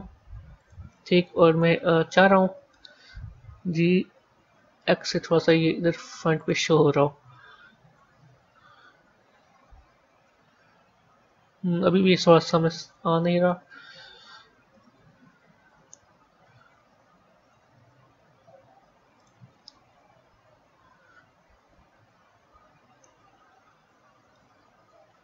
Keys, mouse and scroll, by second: 1.3 KP_3, 1.6 KP_1, 3.4 g, 7.1 KP_1, 7.8 KP_3, 8.4 scroll up 2, 8.9 scroll down 1, 10.2 a, 12.1-14.2 middle drag, 14.2 KP_1, 14.6 KP_3, 15.6 KP_1, 17.3 g, 18.2 x, 21.5 g, 22.3 x, 24.2-25.2 middle drag.